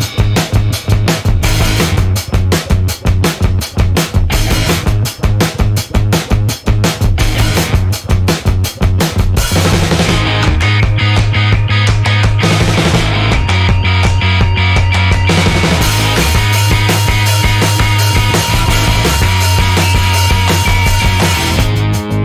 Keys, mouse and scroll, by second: 1.4 shift+8, 3.2 3, 4.0 0, 5.2 /, 5.7 2, 6.5 6, 9.3 click, 11.1-12.4 typing, 15.4 click, 16.6 4, 17.0 2, 19.1 click, 20.5 click, 21.3 0, 22.1 click.